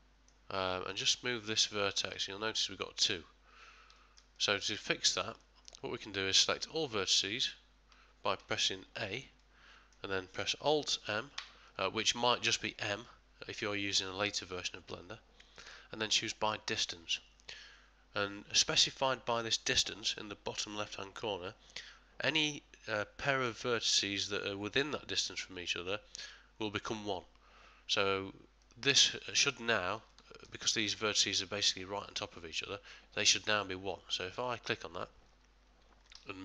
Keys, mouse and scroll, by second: 1.1 click, 2.1 g, 4.0 ctrl+middle click, 4.4 middle click, 5.4 middle click.